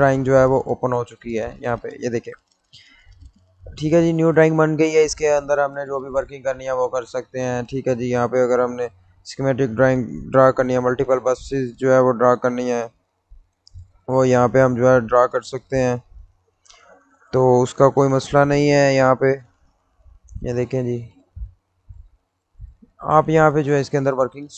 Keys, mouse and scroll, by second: 5.5 click, 10.6 click, 13.0 click, 22.1 middle click, 24.0-24.5 middle drag.